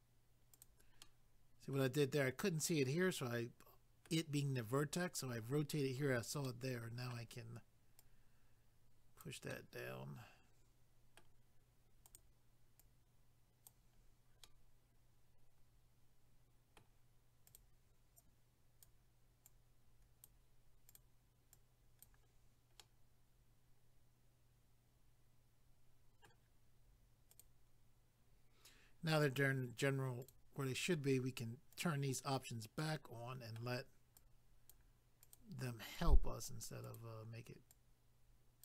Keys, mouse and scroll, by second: 0.6 click, 1.0 middle click, 2.8 middle click, 6.4 middle click, 8.0 click, 9.5 middle click, 12.1 click, 12.8 click, 14.0 scroll down 1, 14.4 middle click, 17.5 click, 18.2 click, 19.5 click, 20.9 click, 21.5 click, 22.3 scroll down 1, 22.8 middle click, 27.3 click, 30.2 click, 31.7 click, 32.8 middle click, 34.2 click, 35.2 click, 36.0 click, 36.9 click.